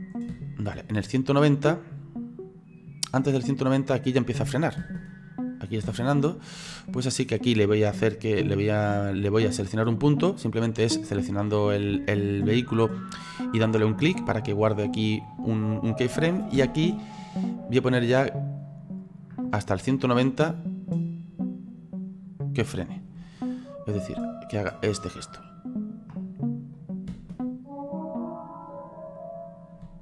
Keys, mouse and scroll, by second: 0.4 space, 0.9-3.9 drag, 4.8 space, 5.9 space, 8.1 right click, 9.2 right click, 9.9 click, 10.7-11.1 scroll up 3, 11.1-15.2 middle drag, 16.1 space, 16.6 space, 20.3-27.1 drag, 27.1 space, 29.8 space.